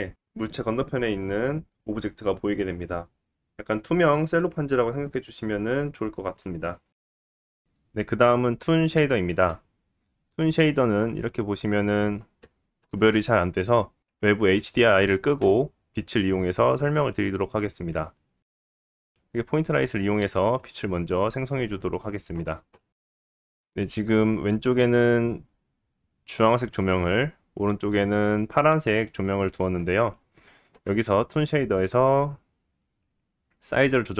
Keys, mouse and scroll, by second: 6.8 click, 6.9-8.1 middle drag, 7.9 scroll down 4, 8.1-18.6 drag, 17.7 middle click, 17.9-20.1 typing, 18.6 middle click, 19.2-20.9 middle drag, 20.9 click, 21.0 middle click, 21.5 click, 21.6 middle click, 21.8 click, 22.5 middle click, 22.9 g, 23.4 g, 23.4-24.9 drag, 23.9-24.3 scroll up 2, 24.9-26.7 middle drag, 26.7 click, 26.8-28.4 middle drag, 28.4 click, 28.5-30.0 middle drag, 30.0 click, 30.1-33.0 middle drag, 33.0-34.1 drag.